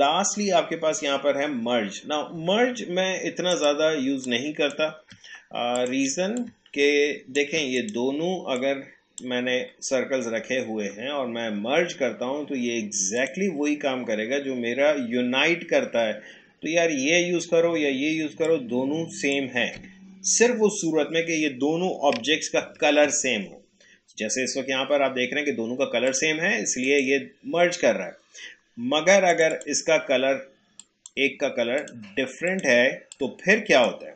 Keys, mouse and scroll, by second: 2.4 Delete, 3.5 click, 4.3-5.8 shift+drag, 6.4-11.9 alt+drag, 13.1 click, 18.4-21.7 drag, 21.9 click, 22.1 ctrl+z, 26.1 click, 29.3 click, 33.4-34.1 drag.